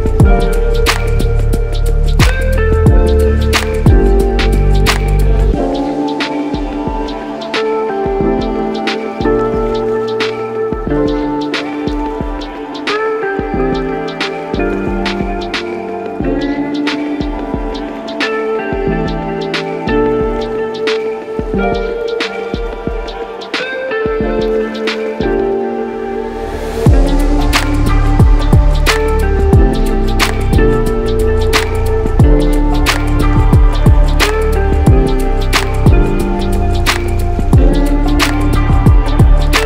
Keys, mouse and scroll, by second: 0.3 shift+click, 0.9 shift+click, 1.7 shift+click, 2.3 shift+click, 2.9 shift+click, 3.5 shift+click, 4.1 shift+click, 4.8 shift+click, 5.6 shift+click, 6.4 shift+click, 7.1 shift+click, 8.7 shift+click, 9.9 shift+click, 10.8 shift+click, 11.4 shift+click, 12.6 shift+click, 13.3 shift+click, 13.9 shift+click, 14.6 shift+click, 23.1 Delete, 23.2 Delete, 29.6 click, 32.1 shift+click, 34.3 shift+click, 34.9 shift+click, 35.9 shift+click, 36.7 shift+click, 37.7 shift+click.